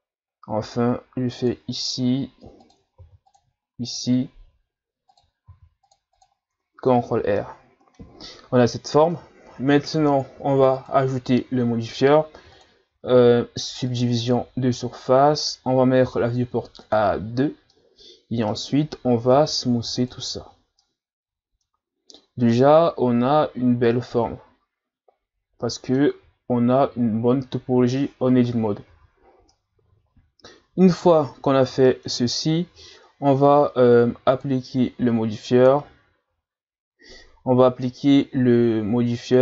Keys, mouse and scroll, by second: 0.2-0.6 scroll up 1, 0.6 ctrl+r, 3.0 ctrl+r, 6.6 Tab, 7.0-7.4 scroll down 1, 7.4-10.4 middle drag, 10.7-15.6 drag, 16.8 click, 17.7-19.3 middle drag, 19.3 w, 20.8-22.0 middle drag, 22.0-22.6 scroll up 1, 22.6-25.6 middle drag, 26.1 Tab, 28.9 Tab, 29.5-32.5 middle drag, 34.3 click.